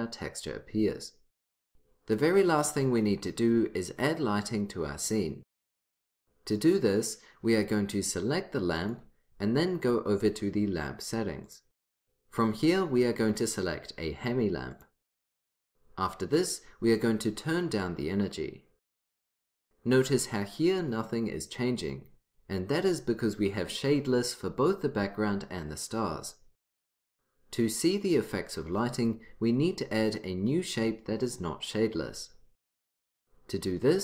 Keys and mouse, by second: 8.9-11.9 drag, 14.9-16.9 drag, 17.1-18.9 drag.